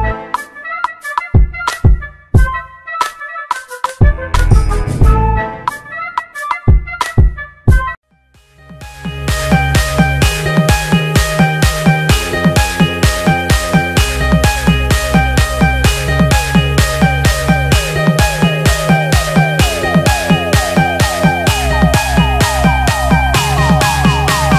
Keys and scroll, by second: 2.3 ctrl+z, 5.3 ctrl+e, 13.5 ctrl+z.